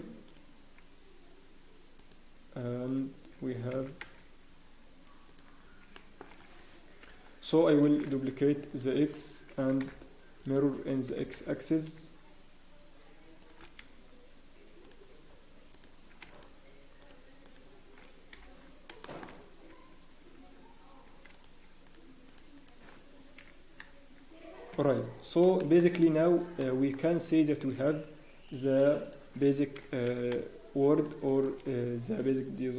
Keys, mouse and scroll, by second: 0.2 click, 0.7 ctrl+r, 0.7 z, 2.2 click, 3.7 g, 5.6 scroll down 1, 5.9 shift+middle click, 6.9 ctrl+l, 7.8 scroll down 3, 7.8 shift+l, 9.5 ctrl+m, 11.1 g, 14.2 z, 15.2 scroll up 1, 15.7 click, 16.3 shift+click, 18.3 scroll up 3, 18.3 f, 18.6 scroll down 1, 19.0 shift+middle click, 19.3 scroll down 4, 19.7 z, 20.5 z, 21.3 click, 21.6 scroll up 3, 21.8 shift+click, 23.4 f, 23.8-24.3 scroll down 6, 24.2 Tab, 24.7 Tab, 25.1 scroll up 1, 25.6 shift+middle click, 25.9-26.3 scroll up 1, 26.6 shift+middle click, 26.6 scroll up 3, 27.6 click, 29.0 shift+click, 29.7 g, 31.4 shift+click.